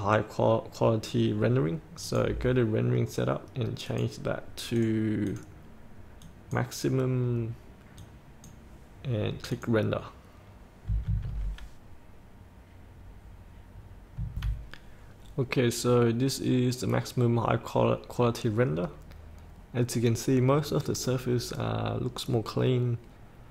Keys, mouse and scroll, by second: 2.1 click, 11.0 F8.